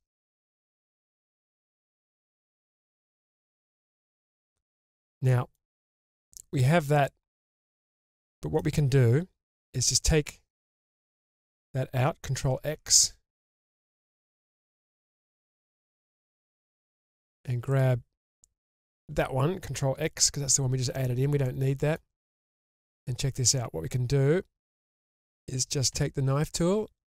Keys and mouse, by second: 0.2 ctrl+x, 0.9-1.5 middle drag, 4.7-5.6 middle drag, 6.2-6.9 drag, 6.9-8.5 middle drag, 9.6 shift+click, 11.4 click, 12.6 ctrl+x, 13.7 click, 14.7 ctrl+x, 15.1 middle click, 16.3-16.6 shift+middle drag, 17.7 alt+click, 18.6 alt+click, 20.9 ctrl+x, 21.5 middle click, 22.2 shift+middle click, 25.9 k.